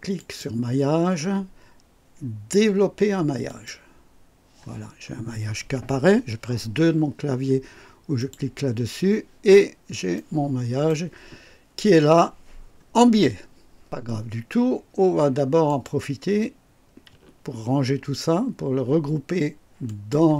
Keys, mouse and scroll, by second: 0.1 click, 3.4 click, 4.7-5.0 scroll down 1, 8.1 click, 9.4-9.7 scroll up 1, 10.0-11.0 right drag, 15.7 click, 19.9 shift+click.